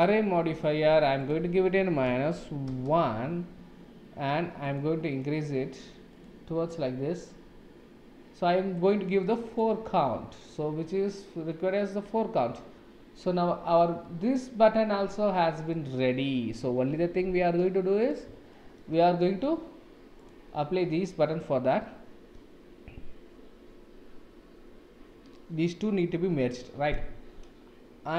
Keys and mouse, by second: 0.0 click, 1.1 click, 4.7 click, 6.1 click, 9.4 click, 14.0-15.7 middle drag, 17.0 ctrl+s, 17.6-18.0 middle drag, 18.5-18.8 shift+middle drag, 19.0-19.4 middle drag, 20.2 click, 21.6-22.3 middle drag.